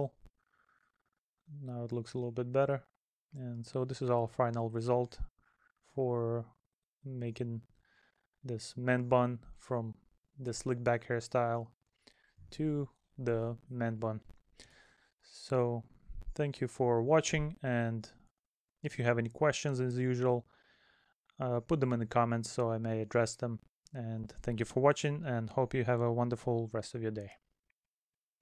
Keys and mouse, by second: 1.3 middle click, 9.5 middle click, 11.4 middle click.